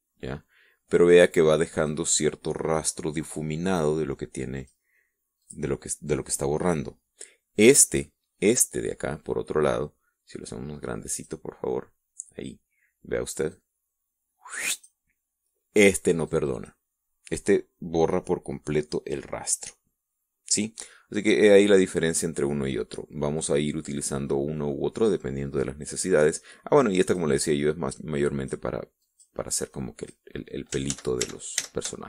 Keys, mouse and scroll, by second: 0.2 click, 1.6 click, 2.2 click, 5.0 click, 5.9 click, 8.3 click, 11.6 click, 14.0-15.5 drag, 16.8 click, 27.6 click, 28.7 click, 29.5 click, 30.2 click, 31.4 ctrl+z.